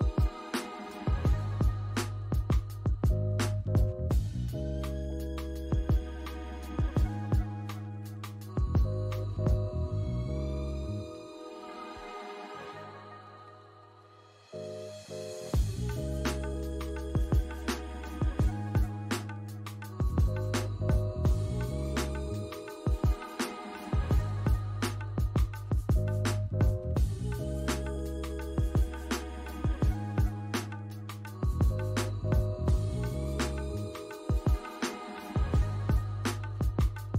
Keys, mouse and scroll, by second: 0.0 alt+middle click, 0.4 alt+click, 2.1 alt+middle click, 2.5 alt+click, 3.1 alt+middle click, 4.0-4.4 scroll down 1, 4.4 middle click, 5.1 scroll down 1, 5.3 middle click, 6.7-7.2 scroll up 1, 7.2 middle click, 8.3 scroll down 1, 8.6 middle click, 10.3 scroll up 1, 11.1 alt+click, 11.6 alt+middle click, 12.0 alt+click, 13.5 double click, 17.0 scroll up 1, 17.4 alt+click, 18.4-19.1 typing, 21.6-22.3 typing, 22.7 scroll up 1, 23.4 alt+click, 23.8 alt+middle click, 23.8 alt+scroll up 1, 25.6 ctrl+d, 26.8 double click, 27.6 alt+middle click, 28.0 alt+click, 28.4 alt+middle click, 31.0 alt+middle click, 34.8 BackSpace.